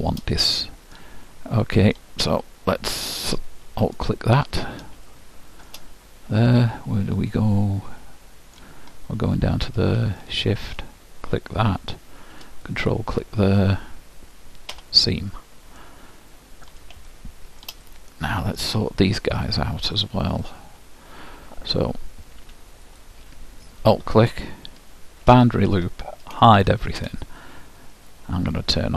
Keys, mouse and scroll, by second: 4.0-5.8 drag, 5.2-8.4 middle drag, 9.0-10.3 scroll up 1, 10.3-12.2 drag, 12.9-14.7 drag, 15.9 middle click, 19.2 middle click, 20.4-22.2 drag, 22.9-24.8 drag, 25.4 shift+', 26.6 shift+h, 28.6 middle click.